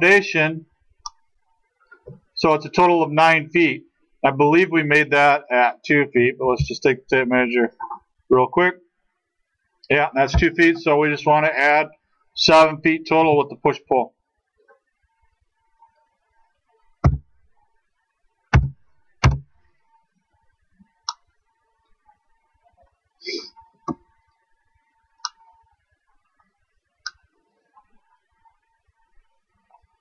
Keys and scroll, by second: 6.5 t, 10.7 Escape, 13.2 p, 17.1 7, 18.5 ', 19.3 Return, 23.7 space.